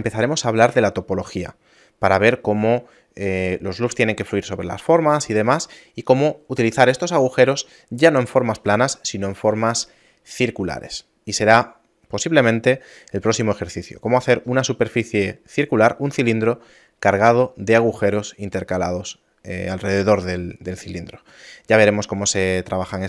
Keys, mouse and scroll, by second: 22.4 middle click, 22.8-23.0 scroll down 10.